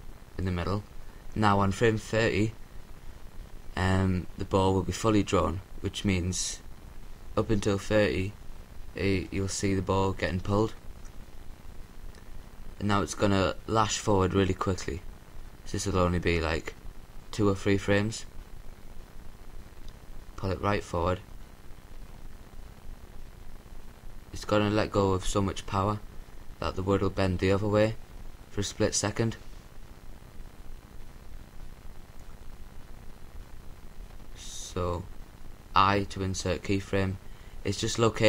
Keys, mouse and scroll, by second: 5.7 i, 12.0-13.8 drag, 16.8-18.3 drag, 28.5-29.7 drag, 30.9-32.4 drag, 35.1 i.